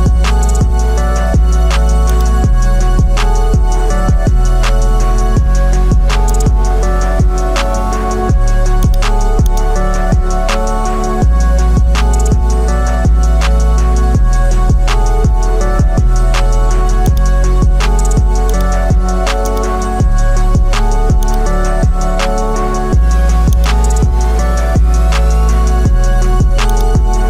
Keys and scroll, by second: 0.7 ctrl+t, 14.6 Return.